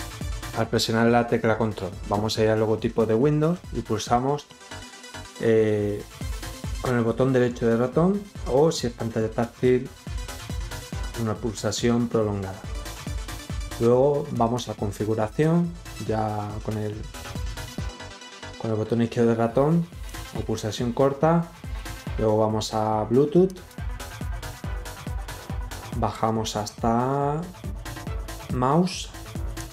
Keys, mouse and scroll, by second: 6.6 right click, 14.3 click, 20.0 click, 23.4 click, 25.8-26.4 scroll down 6, 29.5 click.